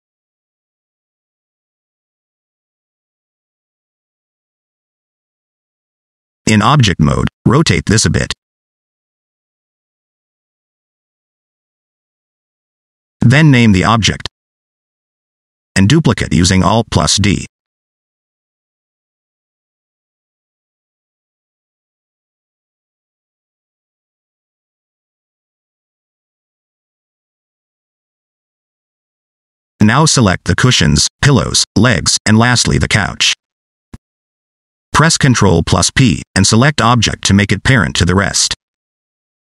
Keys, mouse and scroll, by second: 0.3 click, 0.9 alt+z, 1.1 middle click, 1.5 Tab, 1.6 middle click, 3.3 right click, 5.0 /, 5.6 shift+middle click, 6.4 scroll down 1, 6.4 middle click, 7.0 r, 9.3 middle click, 9.8 click, 10.9 middle click, 11.2 r, 12.6 r, 13.6 middle click, 14.0 click, 14.5 scroll down 1, 14.6 middle click, 14.8 shift+middle click, 15.4 F2, 16.0 l, 17.5 alt+d, 22.5 scroll down 2, 22.8 shift+middle click, 23.0 scroll up 1, 23.2 middle click, 23.8 r, 26.5 middle click, 27.1 click, 27.7 middle click, 29.0-29.5 scroll down 1, 29.5 click, 30.4 shift+click, 31.1 shift+click, 31.6 shift+click, 32.4 middle click, 33.2 shift+click, 33.6 middle click, 34.3 shift+click, 34.7 middle click, 35.0 scroll up 1, 35.3 middle click, 35.5 scroll down 1, 35.6 middle click, 37.6 ctrl+p.